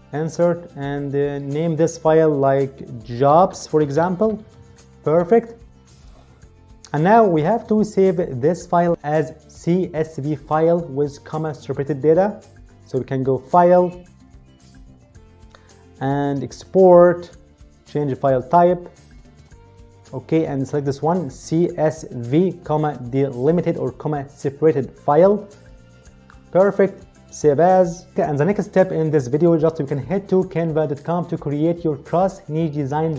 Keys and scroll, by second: 4.5-5.0 typing.